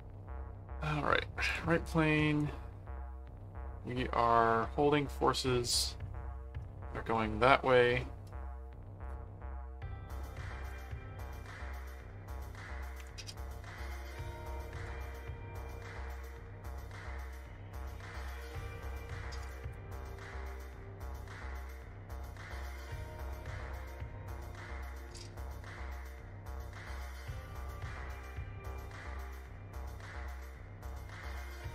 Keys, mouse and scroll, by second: 1.5 click, 2.2 right click, 10.6 click, 13.3 right click, 14.8 click, 16.0 click, 19.4 click, 21.1 click, 25.1 click, 27.8 click, 29.1 click, 30.0 ctrl+click, 30.8 ctrl+click, 31.6 ctrl+alt+click.